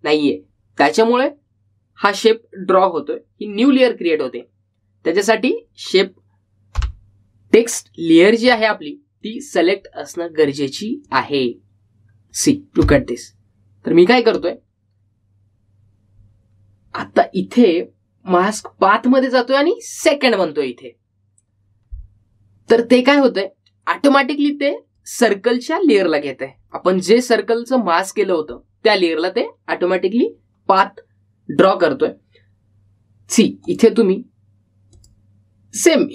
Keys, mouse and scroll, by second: 10.4-18.0 drag, 18.0-19.6 scroll up 1, 19.6 click, 23.8-26.8 drag, 26.8-27.8 scroll up 1, 27.8-30.6 middle drag, 30.8-36.1 drag.